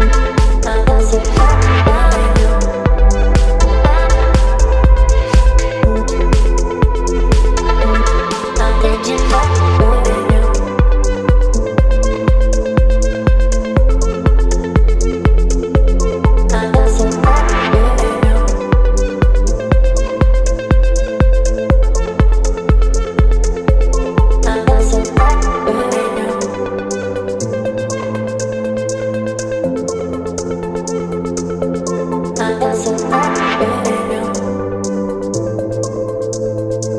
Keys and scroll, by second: 1.6 Return, 3.5 space, 5.3 Up, 23.5 Return, 33.7 Return.